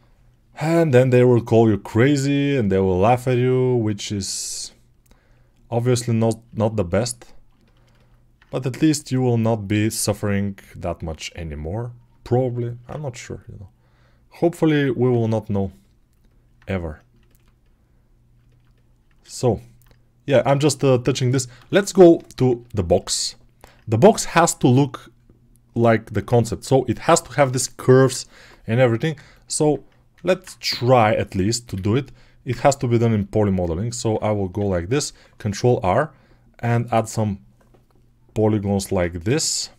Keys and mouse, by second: 8.2-18.4 drag, 18.4-19.5 ctrl+alt+right drag, 19.1 alt+q, 21.5 alt+q, 30.1 alt+q, 30.5 ctrl+Tab, 32.3 Tab, 35.1 ctrl+r, 35.5-36.9 drag, 36.9-39.7 middle drag, 38.7 ctrl+Tab.